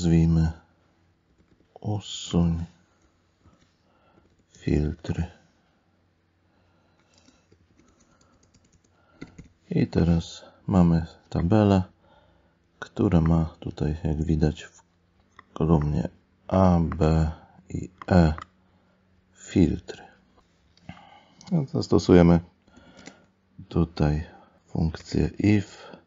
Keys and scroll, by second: 2.3 ctrl+alt+n, 7.2 space, 9.2 Up, 23.0 space, 25.0 space.